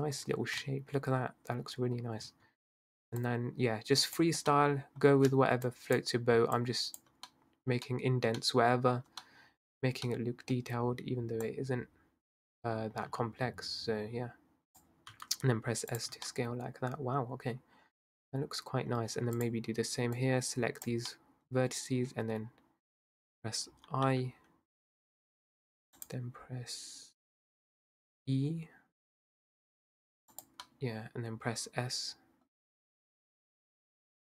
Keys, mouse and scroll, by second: 0.0 Tab, 0.7-2.0 middle drag, 2.0 scroll up 2, 2.2 Tab, 3.2 drag, 4.6-5.7 middle drag, 5.7 shift+click, 6.6 shift+click, 7.7-8.3 scroll down 1, 8.3 scroll up 1, 8.6 middle click, 8.9 scroll down 2, 9.1-9.6 scroll up 1, 9.6 middle click, 9.7-10.1 scroll down 2, 10.1 middle click, 10.6-11.5 scroll up 1, 11.5 click, 15.1 s, 16.1 Tab, 16.2-19.1 middle drag, 19.1 Tab, 19.4 click, 20.2 drag, 21.5 middle click, 21.8-23.8 scroll up 1, 23.8 i, 29.2 e, 30.7-33.2 middle drag, 33.2 s.